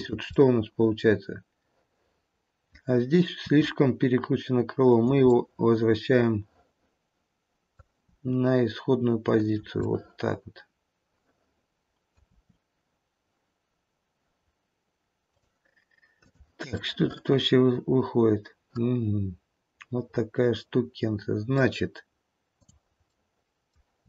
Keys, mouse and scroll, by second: 0.3 middle click, 1.7 middle click, 3.3 r, 5.1 middle click, 6.5 middle click, 8.0 r, 9.8 middle click, 10.8 middle click, 12.2 r, 16.3 click, 16.9 middle click, 17.6 middle click, 19.2 middle click, 22.5 click, 23.1 middle click, 23.3 middle click, 23.5 middle click, 23.9 r.